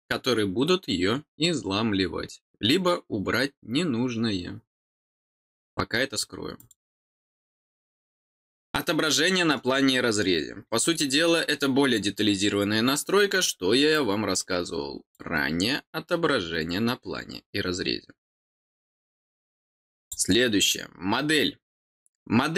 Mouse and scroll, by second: 6.5 click, 9.0 click, 10.1 middle click, 10.8 middle click, 11.2-12.7 middle drag, 13.9-15.1 drag, 20.0 click.